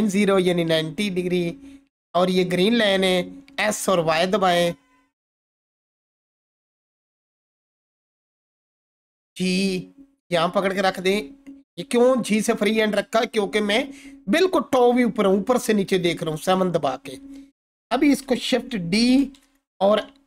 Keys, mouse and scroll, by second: 7.3 ctrl+4, 7.9-8.5 scroll up 1, 8.9 g, 10.7 click, 16.2 click, 16.3-17.6 alt+drag, 19.0 shift+d.